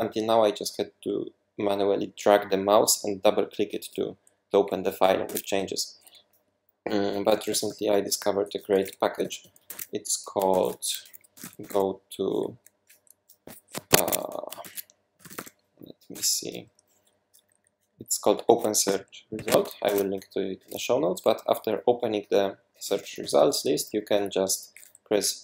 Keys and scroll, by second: 5.3 super+w, 7.3-9.9 typing, 10.5 shift+super+p, 11.1-12.2 typing, 13.9 Escape, 14.0 Escape, 14.6 shift+super+p, 14.9-15.9 typing, 16.1 Return, 17.2 Down, 17.4 Down, 17.5 Down, 17.7 Down, 17.9 Down, 18.4 Up, 19.3 Escape, 19.8 super+2, 22.6-23.9 typing.